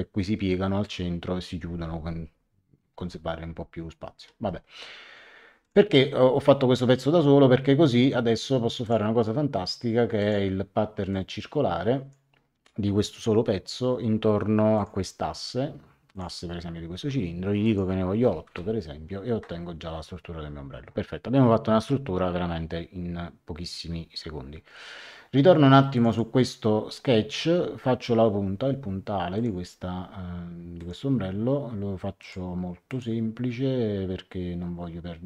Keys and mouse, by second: 5.6 click, 8.8 click, 10.1 click, 14.7 click, 16.1 click, 17.6 click, 18.2 KP_8, 18.4 Return, 25.9 click, 29.3 click, 30.7 click, 32.2 click.